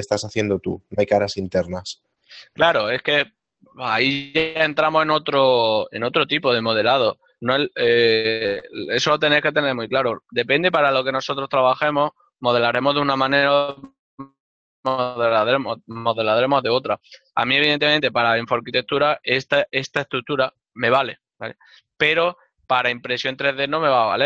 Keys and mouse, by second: 19.4 ctrl+middle click.